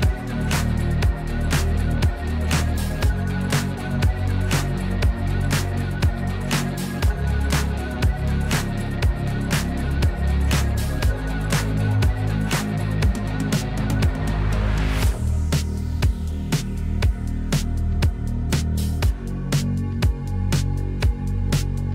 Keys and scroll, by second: 0.0 \, 1.3 Delete, 8.3 p, 9.7 Escape, 13.7 \, 19.6 u.